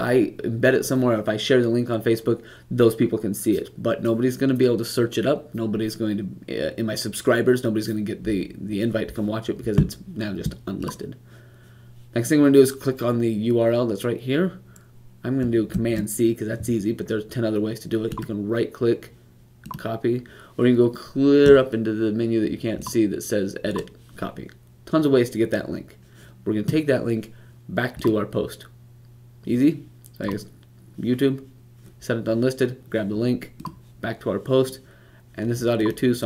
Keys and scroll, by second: 15.6 super+c.